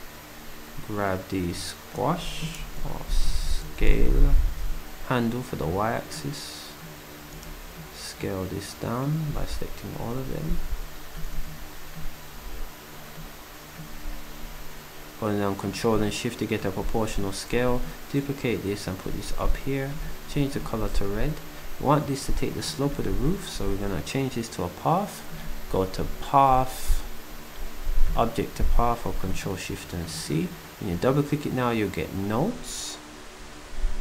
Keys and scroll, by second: 19.5 d, 20.3 s, 23.7 s.